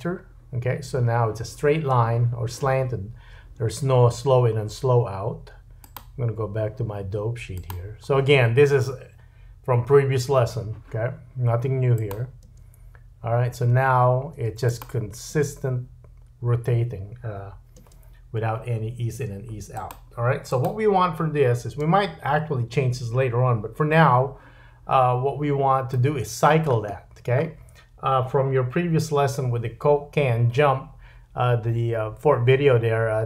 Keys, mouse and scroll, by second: 5.8 click, 12.0 click, 12.4 space, 14.4 space, 14.7 click, 15.3 space, 17.8 space, 19.1 space, 19.8 click, 20.5 click, 21.8 space, 26.1-33.2 middle drag, 26.9-29.0 scroll down 4.